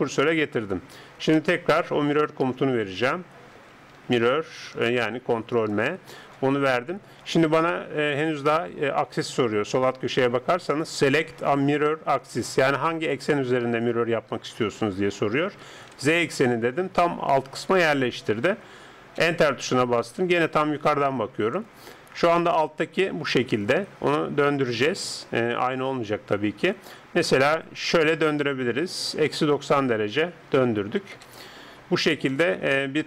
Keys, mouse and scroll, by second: 1.5 space, 4.0 r, 20.8 KP_7, 22.5 r, 32.0-33.0 middle drag.